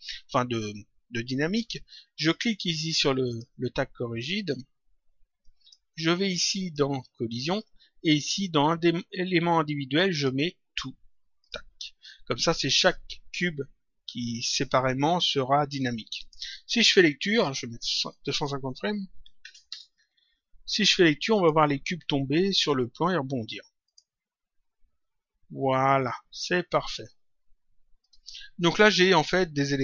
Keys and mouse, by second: 3.2 click, 5.3 click, 10.1 click, 11.6 click, 16.1 click, 18.0 click, 19.6 Return, 20.9 click, 23.7 click, 27.9 click.